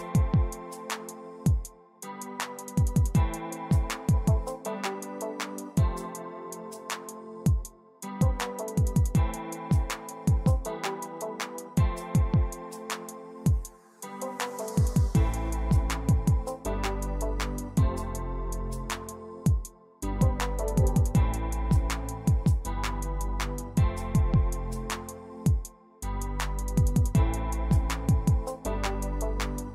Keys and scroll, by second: 1.7 p, 1.9 p, 3.4 c, 4.5-5.9 typing, 7.5 Return, 9.4 r, 10.7 d, 11.4 Return, 12.1 Escape, 12.1 l, 13.1 Escape, 13.9 x, 16.0 l, 17.6 c, 18.4 d, 19.1 6, 19.2 Return, 20.1-23.2 typing, 24.2 Escape.